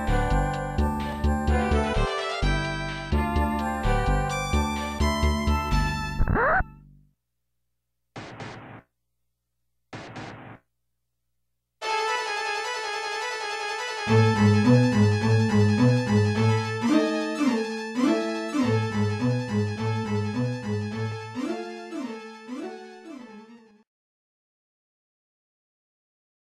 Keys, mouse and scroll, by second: 4.2 ctrl+s, 4.5 click.